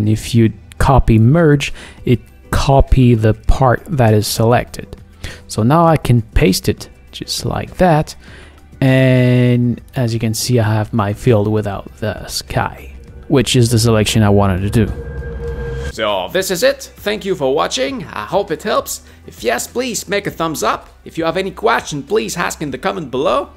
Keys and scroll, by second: 6.3 super+v.